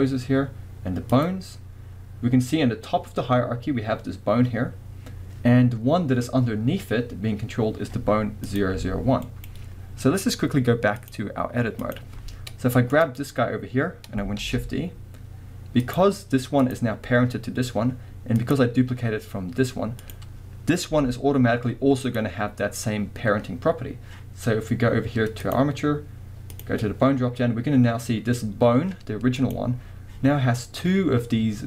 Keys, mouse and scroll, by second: 1.1 click, 8.4 click, 8.8 g, 9.4 right click, 11.0-13.1 drag, 12.4 scroll down 2, 13.6 scroll up 2, 14.4 shift+d, 15.9 click, 16.6 click, 18.3 click, 20.0 click, 20.9 g, 22.2 click, 25.4 click, 26.5 click, 29.4 click.